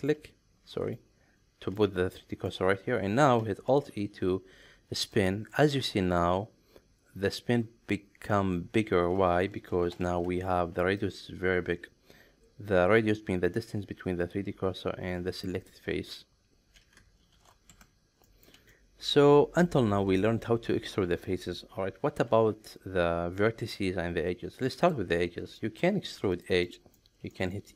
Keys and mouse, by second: 0.2 shift+right drag, 0.9 shift+right click, 2.1 middle click, 3.7 alt+e, 10.0 ctrl+shift+3, 18.3 ctrl+middle click, 18.6 ctrl+z, 19.4 middle click, 20.2-22.2 middle drag, 24.8 click, 25.6 shift+middle click, 26.6 middle drag, 27.3 middle click.